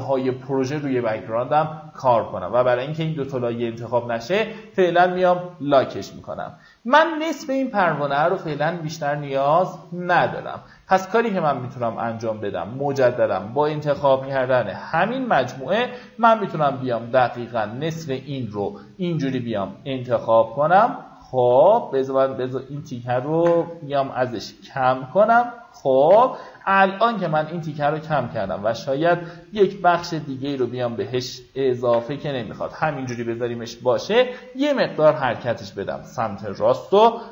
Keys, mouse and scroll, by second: 4.4-12.0 ctrl+drag, 13.9 m, 15.4-17.9 drag, 18.8-21.8 shift+drag, 23.9-25.6 alt+drag, 28.0-30.1 shift+drag, 34.3 Right, 34.6 Right, 34.8 Right, 37.0 b.